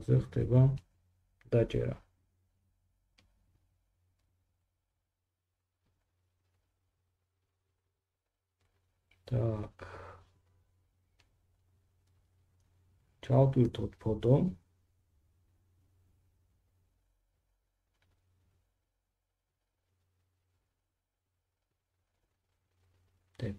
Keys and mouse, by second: 1.0-23.5 drag.